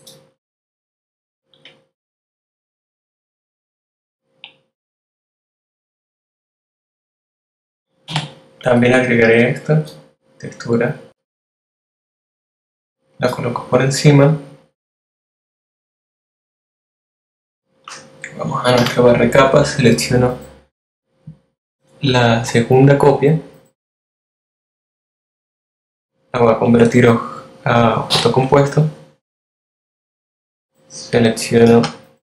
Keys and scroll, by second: 0.0-0.4 typing, 7.1 alt+v, 17.8 shift+F7, 27.1 super+8.